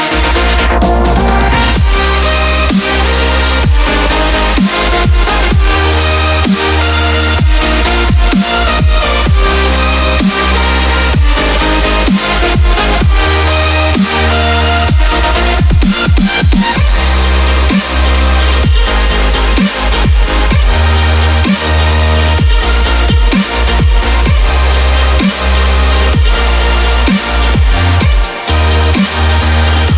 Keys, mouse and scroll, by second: 1.7 ctrl+a, 2.6 click, 5.6 click, 9.3 click, 15.2 click, 19.4 click, 23.3 click, 25.3-28.4 middle drag.